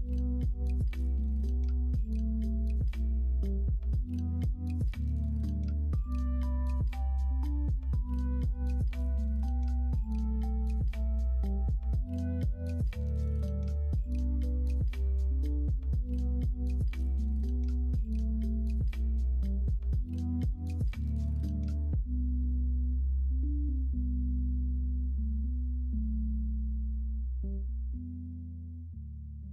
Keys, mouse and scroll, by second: 4.0 click, 4.9-7.3 drag, 8.1 click, 8.6 click, 12.6 click, 19.0 shift+d.